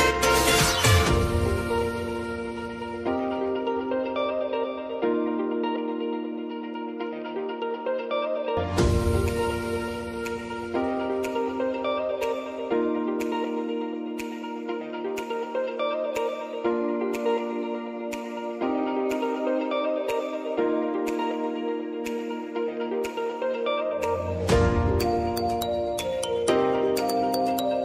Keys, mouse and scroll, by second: 5.1 click, 5.6 ctrl+d, 6.1-8.6 drag, 8.6 ctrl+t, 8.9 click, 9.1 ctrl+a, 13.4 space, 16.5 ctrl+a, 17.5-19.2 drag, 19.6 Return, 20.4-24.5 typing, 25.6 ctrl+a, 26.4-27.8 drag.